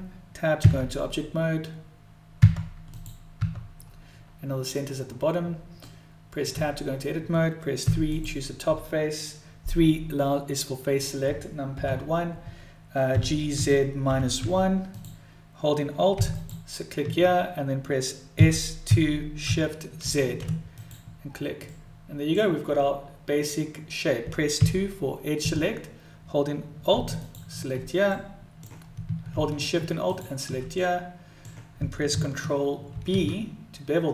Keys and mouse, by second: 3.4 Tab, 5.9 middle click, 6.6 Tab, 7.9 3, 8.2 click, 13.1 g, 16.4 click, 16.4 a, 18.4 s, 19.6 s, 21.8 middle click, 24.7 2, 26.9 a, 27.2 click, 28.2 middle click, 29.0 s, 30.0 click, 30.8 middle click.